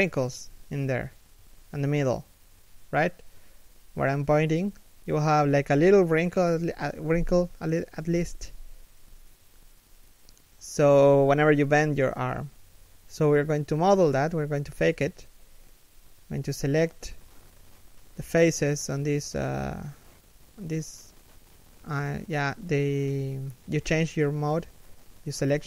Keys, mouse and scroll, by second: 0.0 scroll up 1, 0.6 z, 1.6 z, 1.9 scroll down 1, 2.7 scroll up 1, 2.9 z, 7.7 shift+middle click, 15.2 Tab, 15.7 alt+right click, 16.2 alt+shift+right click, 22.7 Tab.